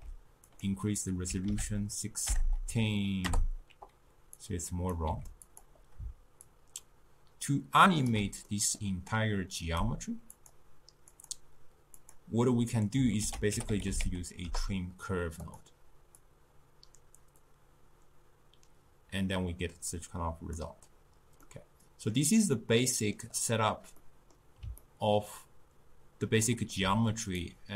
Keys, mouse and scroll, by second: 0.6-2.5 drag, 2.5 BackSpace, 4.5 click, 5.1 g, 6.5-8.5 shift+drag, 8.5-9.7 middle drag, 9.7-13.3 drag, 13.3 ctrl+a, 16.2-19.3 drag, 21.5-27.4 middle drag, 27.4-27.7 drag.